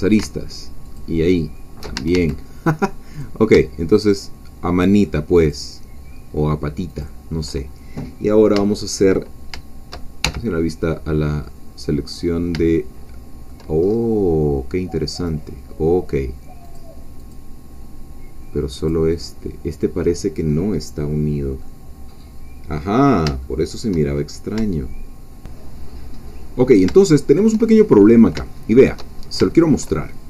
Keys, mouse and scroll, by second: 0.9 alt+shift+click, 2.0 alt+shift+a, 3.2 click, 4.2-5.7 shift+drag, 7.0 shift+click, 8.3 scroll up 2, 8.5 shift+middle click, 8.7 shift+click, 10.3 shift+1, 11.7 scroll down 1, 12.0 middle click, 12.7-13.8 shift+middle drag, 13.8-15.1 shift+scroll up 3, 15.1 click, 16.8 click, 18.9 click, 19.8 middle click, 20.5 scroll up 2, 21.1 scroll down 2, 21.6-24.2 middle drag, 24.2-24.5 shift+scroll up 3, 26.1-26.5 scroll up 2, 26.6-27.0 scroll down 3, 27.0-28.0 shift+middle drag, 28.0 scroll up 1, 28.5 shift+middle click, 29.2-29.5 shift+scroll up 1, 29.5 shift+middle click.